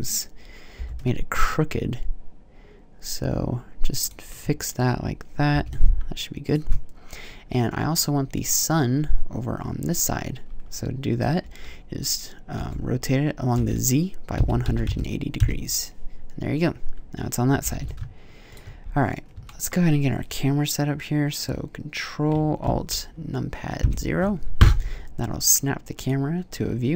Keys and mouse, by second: 0.6 r, 3.9 click, 5.3 g, 6.3-8.5 drag, 12.4 r, 17.5 g, 18.8-19.3 drag, 19.5 click, 23.6 ctrl+alt+KP_0, 25.8 click.